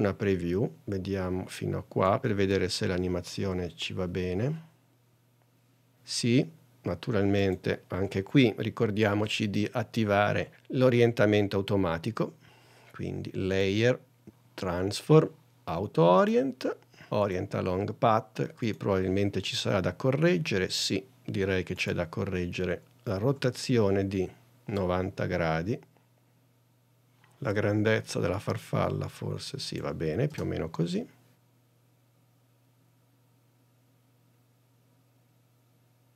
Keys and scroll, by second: 1.6 n, 2.6 space.